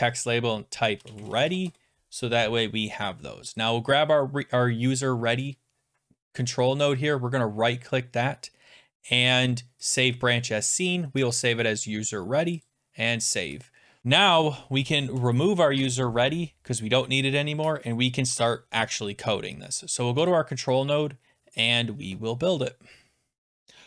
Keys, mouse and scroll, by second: 0.7-2.1 typing, 3.6 click, 7.0 middle click, 9.9 click, 12.7 click, 15.1 Delete, 15.7 Return, 20.3 click, 21.8 click, 23.4 click, 23.4-23.8 scroll.